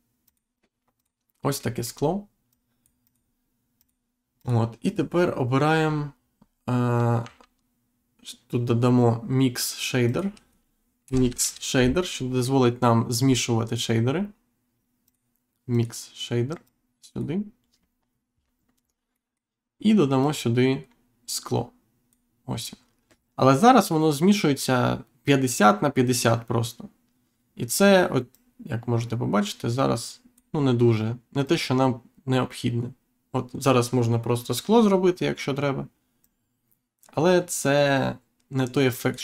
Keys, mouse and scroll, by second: 0.2 click, 0.9 click, 1.3 scroll up 1, 1.7 middle click, 2.5 click, 3.7 click, 4.3 click, 5.8-6.2 scroll down 1, 6.3-6.7 scroll up 1, 7.2 shift+a, 10.0 click, 11.0 m, 11.2 i, 15.0 click, 15.7 click, 16.6 click, 18.7-19.1 scroll up 1, 19.1 middle click, 20.2 click, 28.3 click, 31.4 click, 36.2 click.